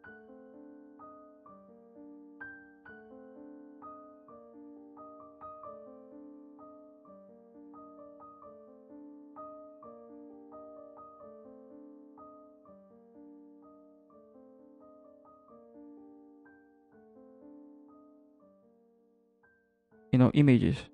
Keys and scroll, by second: 10.2 ], 10.8 ctrl+t, 11.7 Return.